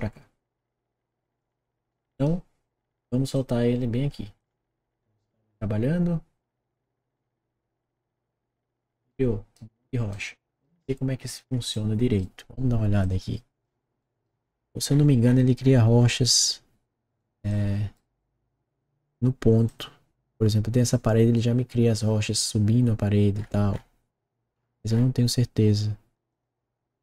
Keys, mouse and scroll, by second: 1.3 click, 1.8 right click, 3.3-4.4 drag, 9.0 right click, 10.1 right click, 10.8 middle click, 11.4 middle click, 11.7 right click, 13.0 click, 13.9 right click, 14.8-16.4 middle drag, 17.1 right click, 17.8-19.0 right drag, 19.0 middle click, 19.6 click, 23.3 middle click, 26.2 click.